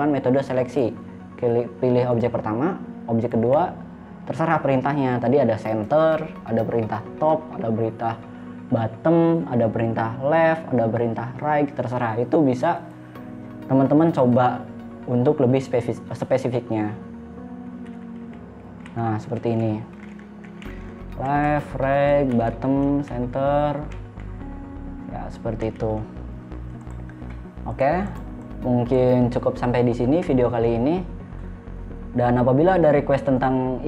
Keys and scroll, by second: 18.1-20.6 typing, 21.7 r, 22.5 b, 23.3 c, 24.4 e, 26.1 a, 27.0 space, 30.5 Delete.